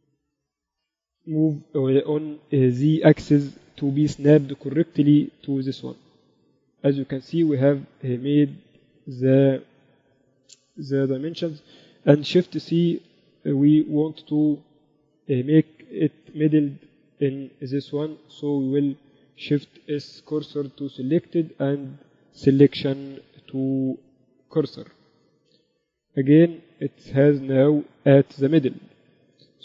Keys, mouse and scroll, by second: 0.2 KP_1, 1.5 ctrl+Up, 1.9 z, 3.4 shift+Tab, 4.3 g, 13.1 shift+super+c, 16.7 KP_8, 17.1 KP_6, 17.3 KP_6, 17.4 z, 19.5-20.7 right drag, 20.3 shift+s, 23.4 shift+s, 28.7 KP_7.